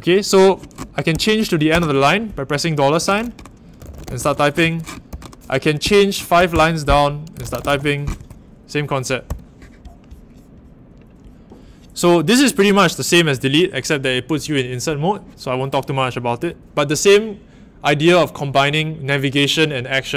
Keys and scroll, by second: 1.1 c, 1.7 shift+4, 3.5-8.1 typing, 9.2 u.